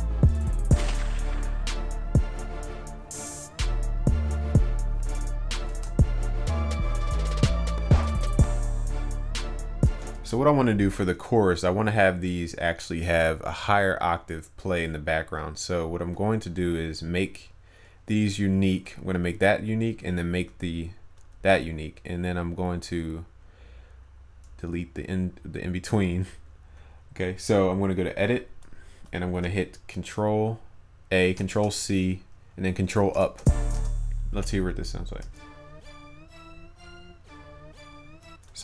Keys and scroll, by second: 5.8 ctrl+s, 29.5 ctrl+a, 31.5 ctrl+c, 33.1 ctrl+Up.